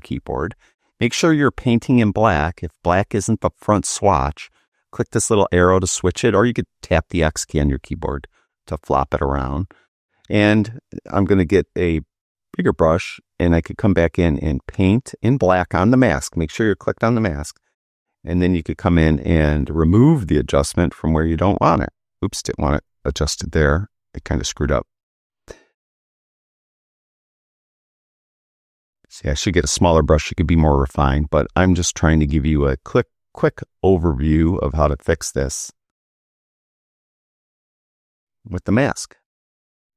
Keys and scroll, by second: 7.2 x, 23.1 super+z.